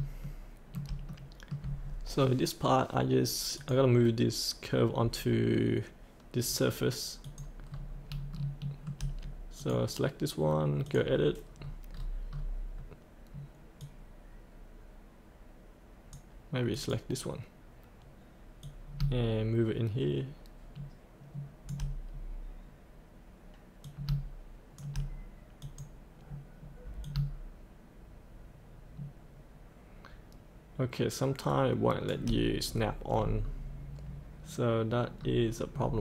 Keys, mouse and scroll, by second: 0.2 shift+middle click, 1.1 middle click, 1.8 scroll down 1, 3.6 click, 6.4 scroll down 1, 7.2 click, 7.7-8.1 scroll up 1, 8.4 shift+middle click, 9.6 click, 11.5-12.0 scroll down 1, 12.4-13.8 scroll down 2, 13.8-21.7 drag, 22.1-22.8 scroll up 1, 23.8 click, 25.7-32.1 drag, 32.7-33.1 scroll up 1, 35.2-35.7 scroll up 1, 35.7-36.0 scroll down 1.